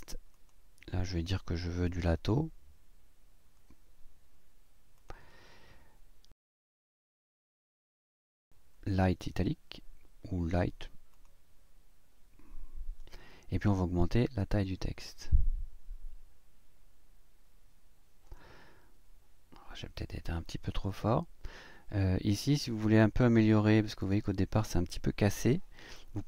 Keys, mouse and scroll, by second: 0.3 click, 2.0 l, 4.0-4.4 scroll down 1, 5.0 click, 5.7 click, 6.8 click, 11.1 click, 14.1 click, 20.0 click.